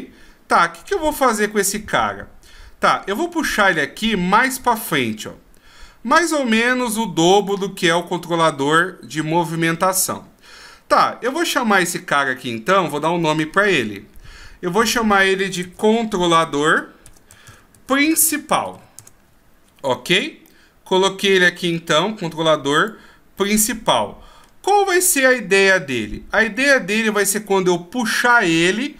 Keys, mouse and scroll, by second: 11.3 right click, 13.2-14.5 scroll up 18, 14.8 click, 20.4 middle click, 22.8 click, 23.3 middle click, 25.3 middle click.